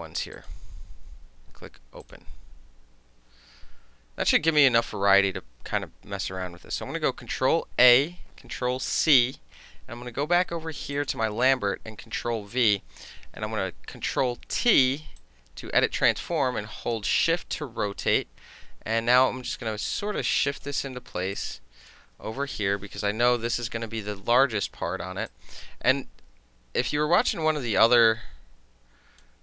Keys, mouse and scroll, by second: 0.4 ctrl+click, 2.1 click, 7.6 ctrl+a, 9.0 ctrl+c, 11.0 click, 12.0 ctrl+v, 13.5 ctrl+t, 15.2-17.0 drag, 17.0-18.1 shift+middle drag, 18.1-20.7 drag, 20.7 middle click, 21.2 space, 21.4 click, 21.9 middle click, 23.3 ctrl+-, 24.5 middle click, 25.3-29.3 shift+drag, 29.3 middle click.